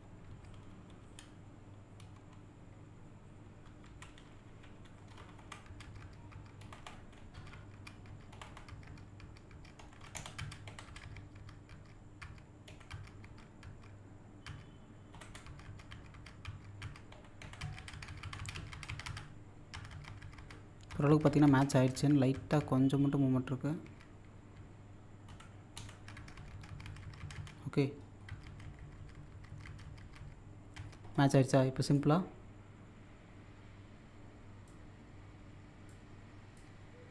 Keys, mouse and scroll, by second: 0.7 typing, 4.2-5.0 typing, 5.4 Up, 6.6 Up, 7.0 Right, 8.3 Up, 10.2 Left, 15.1 Right, 17.5 typing, 19.5 scroll up 1, 20.7 scroll up 1, 22.4 typing, 25.8 Right, 28.1 scroll down 1, 31.1-31.9 scroll down 1, 31.9-35.6 drag, 35.9-37.1 drag.